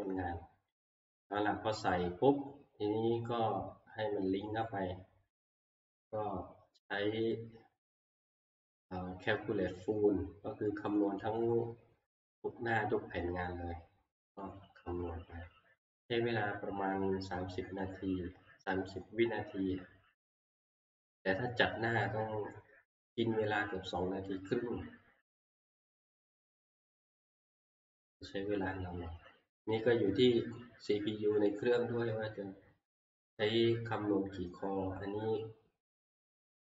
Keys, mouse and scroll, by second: 4.6 click, 14.4 click, 17.9 click, 29.7-34.8 drag.